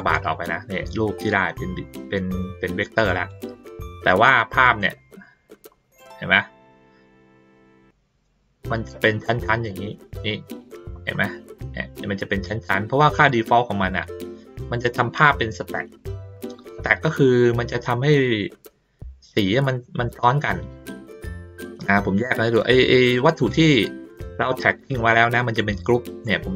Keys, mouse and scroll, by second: 1.3-3.3 drag, 3.8 middle click, 4.9 ctrl+middle click, 5.7 ctrl+middle click, 6.5 ctrl+middle click, 8.4 ctrl+middle click, 9.7 middle click, 10.6 ctrl+middle click, 11.0 ctrl+middle click, 11.6 ctrl+middle click, 13.2 middle click, 14.6 middle click, 15.2 ctrl+middle click, 16.1 ctrl+middle click, 24.4 click, 25.1 click, 26.2-26.5 drag.